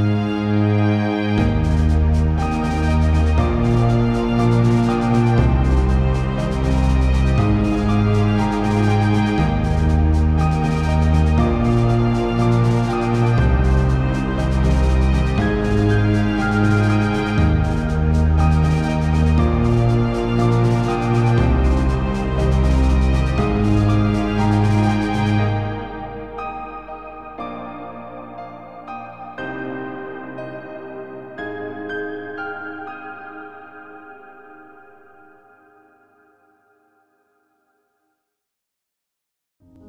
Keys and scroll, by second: 23.6 ctrl+-.